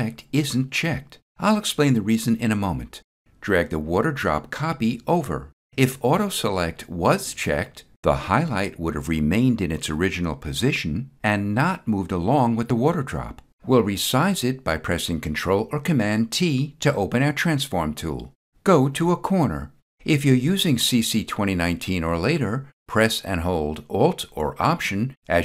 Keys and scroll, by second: 15.2 ctrl+t.